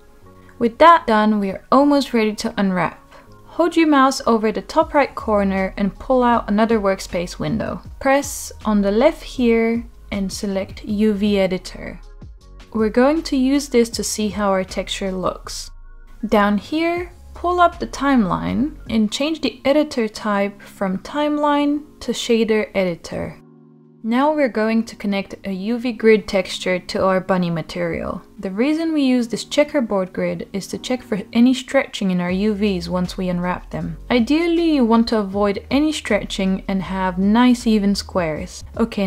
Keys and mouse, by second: 4.1-7.3 drag, 8.7-11.9 drag, 17.3-19.6 drag, 26.2-26.5 middle drag, 27.6 click, 28.9-30.3 middle drag, 30.3 click, 32.1-35.2 middle drag.